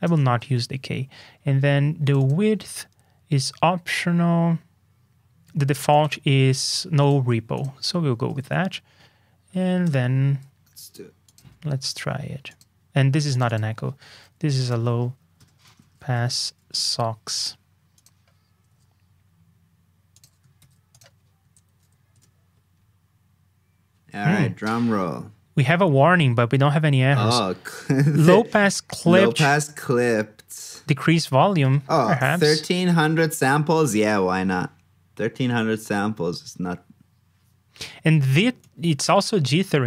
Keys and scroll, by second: 0.4 super+Tab, 8.3 super+Tab, 20.5 super+c, 21.7 super+v, 31.6 super+Tab.